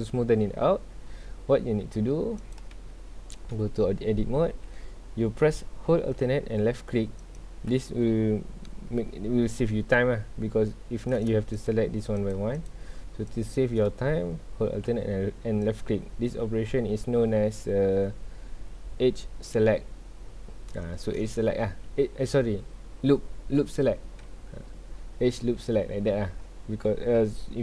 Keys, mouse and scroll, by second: 2.4 click, 2.7 Tab, 7.2 alt+click, 11.1 click, 11.5 shift+click, 12.2 shift+click, 12.5 shift+click, 13.3 shift+click, 15.6 alt+click.